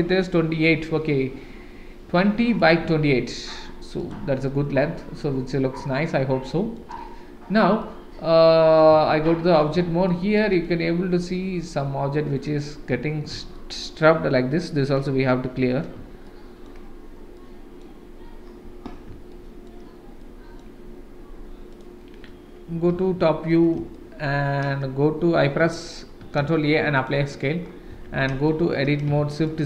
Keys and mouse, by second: 2.6 click, 4.0 click, 4.4-6.7 middle drag, 7.8-8.8 middle drag, 9.1 shift+z, 9.5 middle drag, 10.1 shift+middle drag, 10.6-12.7 middle drag, 13.5 shift+middle drag, 14.6-14.9 middle drag, 16.3-16.7 shift+middle drag, 17.3-17.8 middle drag, 19.3-19.7 shift+middle drag, 20.2-20.6 middle drag, 21.7 click, 22.9 KP_7, 23.9-24.2 shift+middle drag, 26.3 ctrl+a, 27.9 Tab, 28.5 shift+middle click, 29.2 shift+z, 29.5 click.